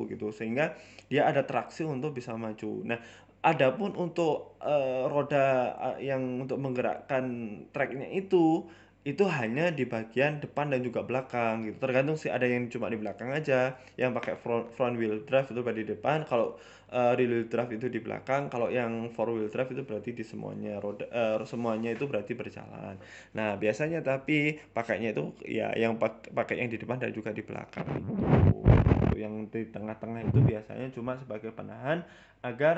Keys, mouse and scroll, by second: 0.2 middle click, 0.5-1.1 scroll down 4, 0.6 middle click, 1.1 scroll up 2, 1.6 KP_1, 2.0 scroll up 3, 2.3 shift+middle click, 3.4 scroll up 1, 3.6 shift+middle click, 4.0 shift+a, 5.0 shift+a, 6.4-6.8 scroll down 2, 6.8 r, 8.1-10.7 typing, 9.7 scroll up 3, 9.8 shift+middle click, 12.2 g, 12.2 s, 15.0-15.7 scroll up 3, 15.2 shift+middle click, 15.7 e, 16.4 Tab, 16.9 e, 17.7 ctrl+z, 17.7 middle click, 17.9 scroll down 4, 18.1 middle click, 18.9 middle click, 19.3 ctrl+r, 20.4 middle click, 20.8 click, 21.6 Delete, 22.7-23.0 scroll down 8, 23.0 middle click, 23.7-24.4 scroll up 7, 24.0 middle click, 25.4 click, 27.3 middle click, 28.3 click, 28.8 middle click, 29.5-30.1 scroll up 2, 30.1 click, 30.6 click, 30.7 click, 30.9 middle click, 31.5 middle click, 32.3 middle click.